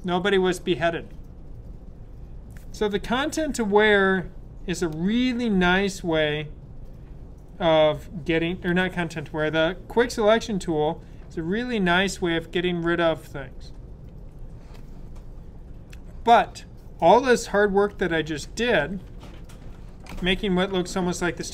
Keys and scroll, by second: 14.0 super+d, 17.9 super+-, 18.3 super+-, 19.0 super+-.